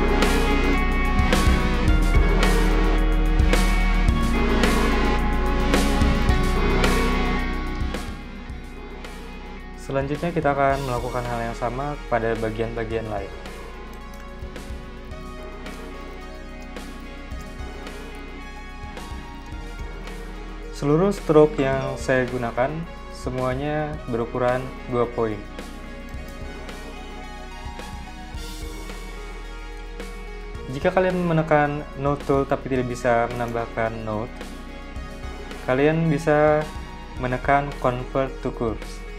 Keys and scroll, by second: 12.6 z, 13.3 v, 14.4 super+c, 14.4 super+v, 15.2 BackSpace, 17.8 2, 17.9 Return, 19.0 z, 19.6 v, 25.0 z, 26.3 v, 26.9 a.